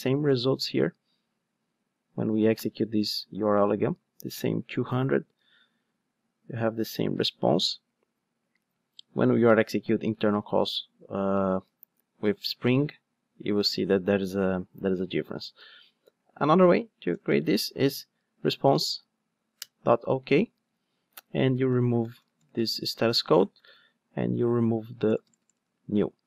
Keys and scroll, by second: 19.6 Return, 22.0 alt+BackSpace.